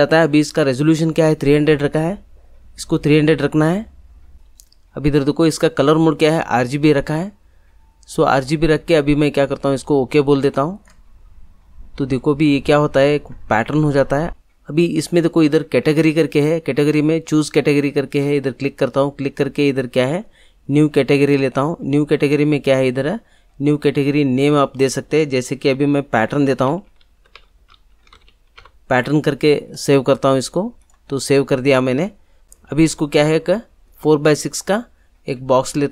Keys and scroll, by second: 26.2 p, 26.4 a, 26.9 t, 28.0 e, 28.1 r, 28.5 n.